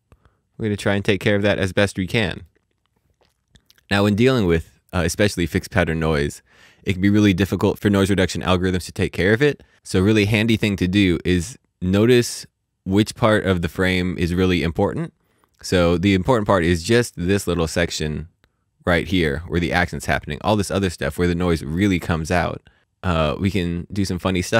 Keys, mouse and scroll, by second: 1.0 middle click.